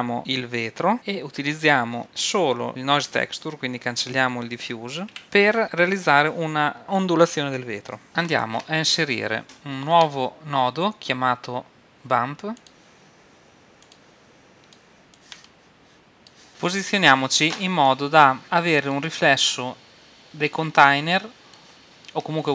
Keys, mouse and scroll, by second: 0.2-2.7 drag, 5.2 x, 5.4 middle click, 6.8 click, 8.0-9.9 drag, 9.9 shift+a, 14.0-15.0 drag, 15.2-17.6 drag, 17.9-22.5 middle drag.